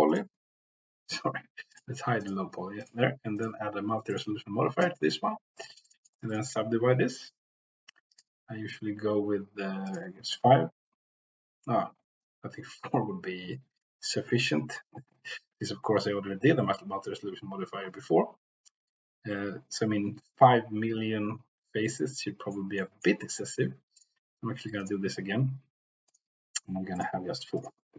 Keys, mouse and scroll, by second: 0.0 click, 2.1 click, 3.3-4.3 drag, 5.5-8.7 drag, 11.4-18.2 drag, 21.9 middle click, 22.8 middle click, 23.9 click, 24.8-26.3 drag.